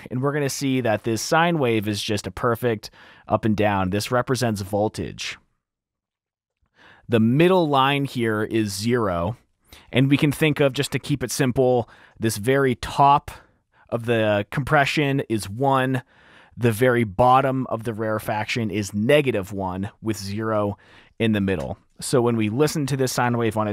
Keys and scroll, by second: 0.0-1.3 typing, 3.2 typing, 21.7 r.